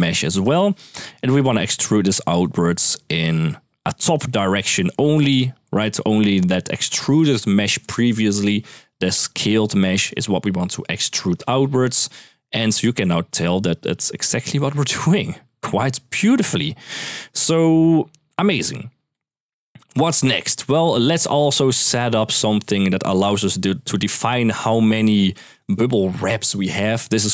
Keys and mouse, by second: 0.2 click, 1.0 middle drag, 2.7 click, 4.0-5.0 drag, 9.6 click, 11.9 click, 12.5-12.8 middle drag, 13.1-14.2 middle drag, 18.3 click, 18.9 middle click, 19.5 click, 20.2 middle click, 20.6 middle click, 21.1-21.7 drag, 23.0 shift+middle click.